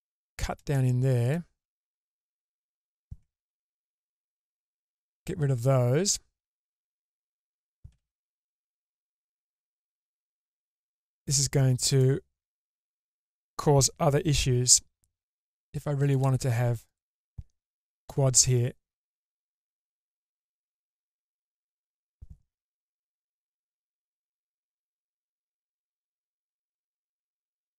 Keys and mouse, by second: 1.2 click, 2.4 shift+click, 4.0 ctrl+x, 4.6-7.4 middle drag, 7.4 1, 8.0 g, 13.6 k, 14.4 k, 16.9 click, 18.0 k, 22.8 g, 24.7 click, 25.2 g, 26.9 click, 27.5 g.